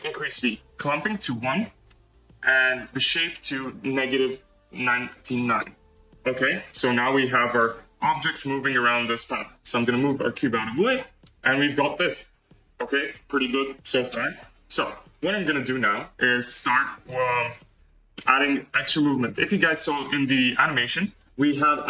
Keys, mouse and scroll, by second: 0.7-1.8 drag, 1.8-3.3 scroll down 2, 3.3-5.0 drag, 5.0-5.5 scroll up 2, 7.1-8.0 drag, 8.0 g, 15.9 middle click, 18.1-21.8 middle drag.